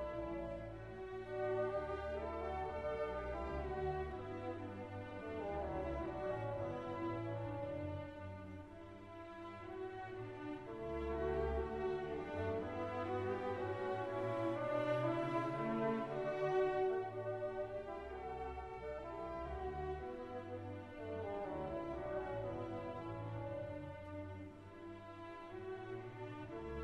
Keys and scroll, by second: 6.2 ctrl+t, 10.1 ctrl+l.